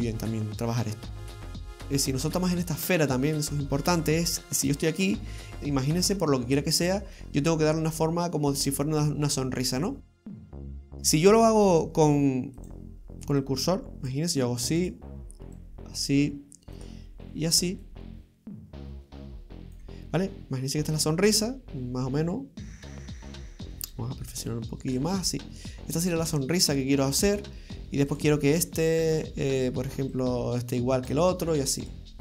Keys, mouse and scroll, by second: 0.2 scroll down 1, 0.5-1.4 scroll up 4, 1.4 shift+middle click, 1.4 scroll down 2, 2.3-3.4 scroll down 2, 3.5 middle click, 4.6 right click, 6.4 middle click, 12.6 click, 13.4 click, 14.8 right click, 15.6 click, 16.8 right click, 17.9 click, 23.9 click, 28.1 right click, 30.1 click, 31.8 right click.